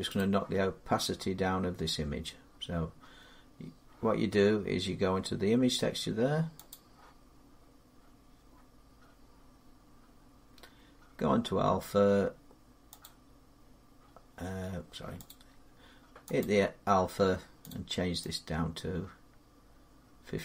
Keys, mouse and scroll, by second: 6.5 click, 12.8 click, 15.0 click, 16.2 click, 17.4 click.